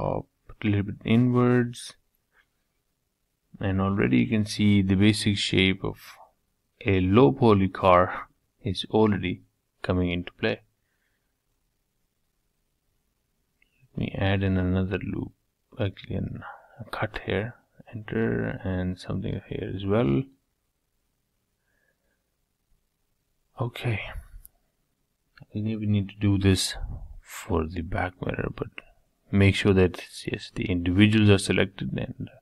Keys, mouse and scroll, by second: 0.8-2.8 middle drag, 3.3 3, 4.0 Tab, 5.0 ctrl+a, 6.1 Tab, 6.6 middle click, 7.3 3, 7.5 click, 10.9 k, 11.4-11.8 scroll up 2, 11.8-13.7 shift+middle drag, 17.3 k, 22.6-23.6 middle drag, 23.6-25.1 drag, 26.1-28.0 drag, 28.3-32.4 drag.